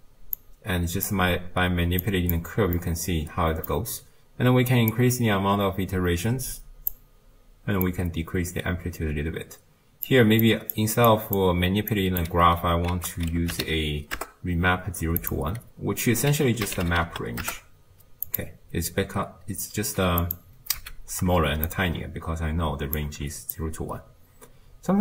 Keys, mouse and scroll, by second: 2.8-5.5 middle drag, 5.5-14.2 drag, 14.2 ctrl+a, 17.5 ctrl+a, 20.4 click, 20.8 x, 22.0-25.0 shift+drag.